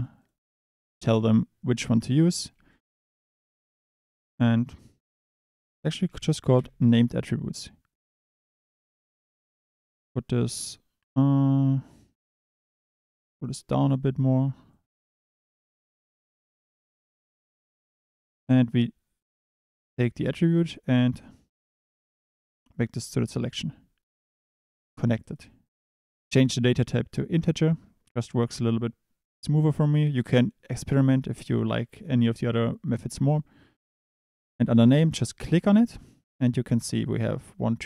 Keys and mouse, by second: 0.4-2.4 drag, 2.5 shift+a, 12.1 middle click, 12.4 click, 13.6 click, 14.7 click, 19.2 click, 24.3 click, 25.2 click, 25.9-27.4 drag, 30.2-33.3 drag, 34.6 click, 35.7-37.8 drag.